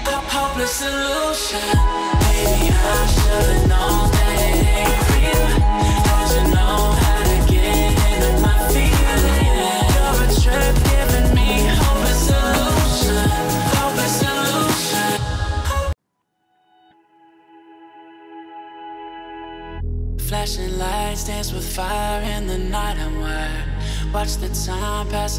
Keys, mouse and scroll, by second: 0.0-0.8 ctrl+alt+scroll down 2, 0.8 ctrl+F7, 1.4-2.9 ctrl+alt+scroll down 2, 2.9-6.1 ctrl+drag, 6.3-7.2 ctrl+alt+scroll up 2, 10.1 right click, 12.4 click, 17.1 alt+scroll down 1, 17.2 alt+scroll up 1, 17.4 click, 17.9 click, 18.2 alt+scroll up 1, 18.5 click, 19.9-20.4 scroll down 1, 21.2-21.5 scroll up 1, 21.9 scroll down 1, 22.5-23.6 scroll down 1, 23.6 scroll up 1, 24.0 click.